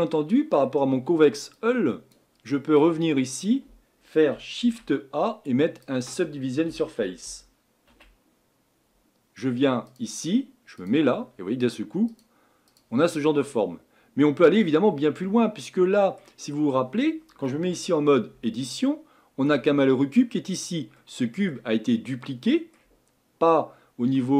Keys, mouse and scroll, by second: 1.6-2.1 scroll down 2, 12.2 click, 13.1 scroll down 2, 13.5-18.4 middle drag, 18.4 Tab, 18.9 middle click, 19.7-20.5 scroll up 4, 20.5-21.0 scroll down 3, 21.0-22.1 middle drag, 22.1 scroll up 1, 22.2-24.3 middle drag.